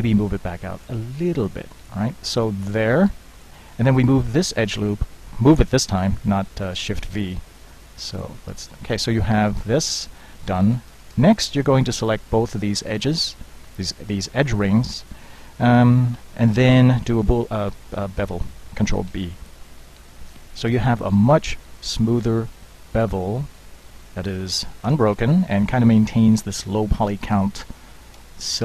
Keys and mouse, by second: 1.2 s, 8.2 middle click, 12.1 alt+click, 12.9 alt+click, 14.0 middle click, 14.9 click, 16.2 z, 19.2 ctrl+b, 24.3 z, 24.7 z, 24.9 Tab.